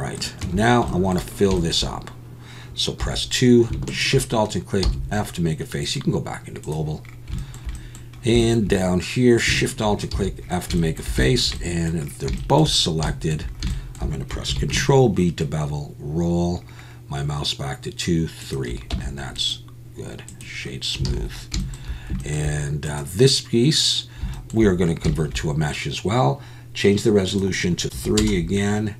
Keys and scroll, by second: 0.4 Tab, 3.0 2, 4.8 f, 14.5 ctrl+b, 18.9 Tab, 21.1 alt+a.